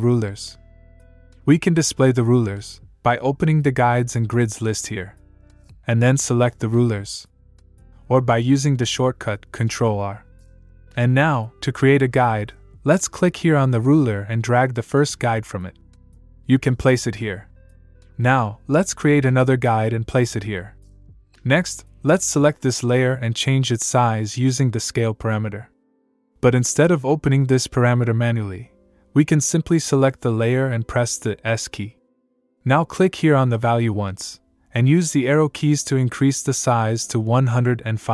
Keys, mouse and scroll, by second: 2.4 click, 8.3 click, 10.9 ctrl+Num_Lock, 11.1 ctrl+r, 14.4 click, 25.2 click, 26.5 click, 29.0 click, 31.6 s, 32.9 click, 34.2 Up, 37.0 Up, 37.2 Down.